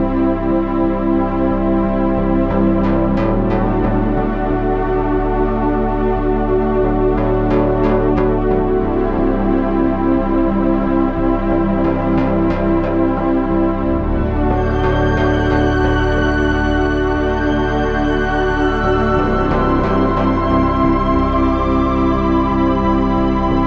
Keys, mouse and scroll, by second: 5.3 Tab, 5.9 z, 8.4 KP_7, 10.4 Tab, 10.6 z, 12.6-16.0 ctrl+z, 16.0 ctrl+shift+z, 19.3 KP_3, 21.1 KP_7.